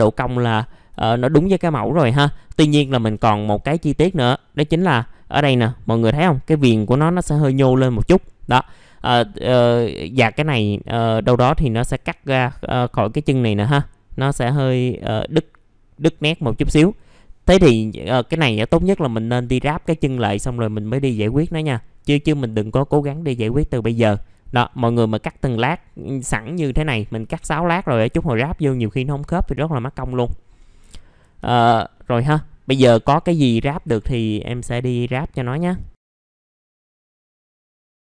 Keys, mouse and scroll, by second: 0.7 scroll down 1, 1.0 alt+middle click, 2.3 middle click, 2.9 alt+middle click, 3.6-4.0 scroll up 1, 4.0 middle click, 22.7 scroll down 1, 24.6-30.4 scroll up 1, 30.4-30.8 scroll down 1, 30.9 alt+middle click, 31.4 alt+middle click, 32.8 scroll up 1, 34.4 middle click, 36.1 click, 36.4 alt+middle click, 37.0 middle click, 37.0 scroll down 1, 37.4 middle click, 37.8 scroll down 1.